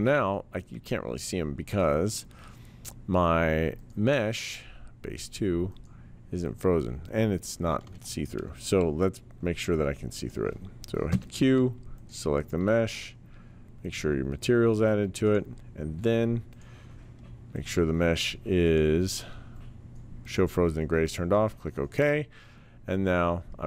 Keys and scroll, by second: 11.1 q.